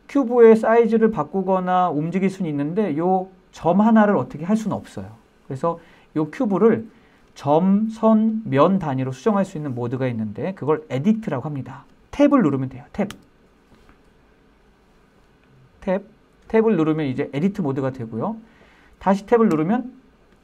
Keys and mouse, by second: 12.3 Tab, 18.6 Tab.